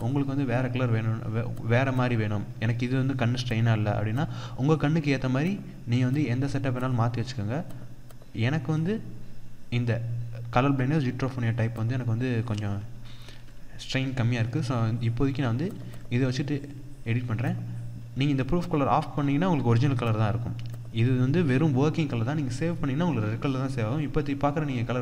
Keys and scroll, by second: 12.8 ctrl+-, 15.3 ctrl+=.